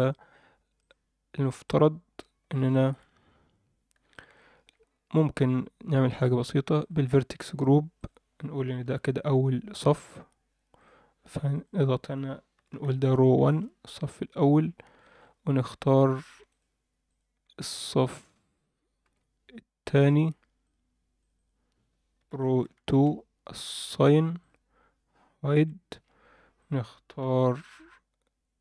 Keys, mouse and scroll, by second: 1.6 click, 2.7 alt+shift+middle click, 3.2-3.6 scroll up 2, 3.6-4.1 scroll down 2, 4.1 alt+shift+middle click, 4.5-5.8 scroll up 1, 5.8-6.8 scroll up 1, 6.8 click, 7.9 click, 8.9 ctrl+l, 10.7 click, 11.5 click, 11.7-13.5 drag, 14.6 scroll up 1, 15.0 alt+shift+middle click, 15.5 click, 15.9 shift+click, 17.1 shift+click, 17.6 shift+click, 18.2 shift+click, 19.0 ctrl+l, 20.6 drag, 21.3-22.9 drag, 24.4 click, 25.5 h, 26.6 click, 27.2 c.